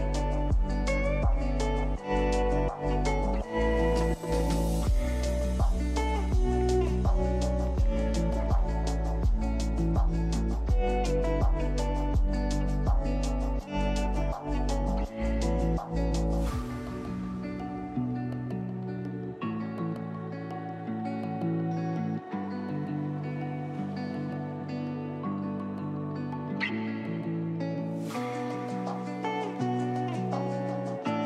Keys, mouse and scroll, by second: 1.1 click, 2.9 click, 4.4 click, 6.1 alt+click, 6.5 e, 7.8 e, 10.8 click, 11.1 scroll down 3, 11.2 shift+middle click, 11.4-12.0 scroll up 4, 11.4 shift+middle click, 11.9 shift+middle click, 12.0 shift+middle click, 12.9 alt+click, 13.4 e, 15.2 e, 16.8 click, 17.8 click, 17.9-18.5 scroll down 3, 18.0 shift+middle click, 18.3 Tab, 18.3 click, 18.5 middle click, 19.0 scroll up 2, 19.1 shift+middle click, 19.4 shift+a, 19.9 s, 21.3 click, 21.4-22.0 scroll up 5, 21.5 shift+middle click, 21.8 click, 22.0 scroll down 6, 22.2 click, 22.3 s, 22.8 click, 22.8-23.2 scroll up 2, 23.0 shift+middle click, 23.3 KP_Decimal, 23.4 scroll down 4, 23.6 shift+middle drag, 23.8 g, 26.0 scroll up 1, 26.2-26.6 scroll down 10, 26.6 click, 26.8 click, 27.0 middle click, 27.2 click, 27.6 scroll up 1, 27.7-28.0 shift+middle drag, 28.0 drag, 28.2 shift+click, 28.4 ctrl+w, 28.7 click, 29.4 click, 30.7 click, 31.0 scroll up 2.